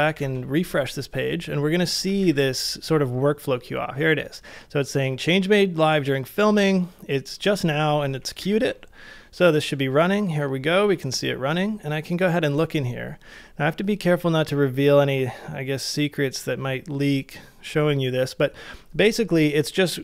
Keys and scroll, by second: 0.1 super+r, 8.4 super+r.